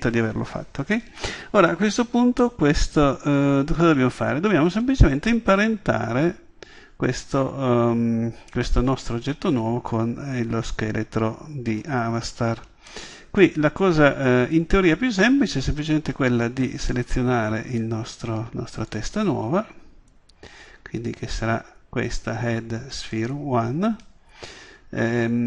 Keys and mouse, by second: 0.5-1.7 middle drag, 2.4-2.8 middle drag, 3.4-6.7 middle drag, 18.9-25.0 drag.